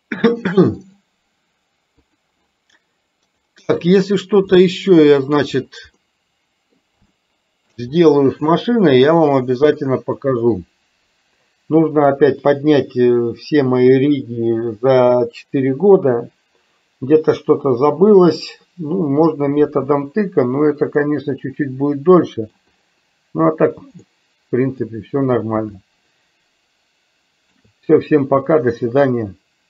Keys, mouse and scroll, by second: 0.9 click, 2.0 click, 3.3-4.2 drag, 4.5-5.4 middle drag, 6.2-6.8 middle drag, 7.3-7.8 shift+middle drag, 8.7-10.3 middle drag, 21.0-22.5 middle drag, 24.2 middle click, 25.9-27.7 shift+middle drag.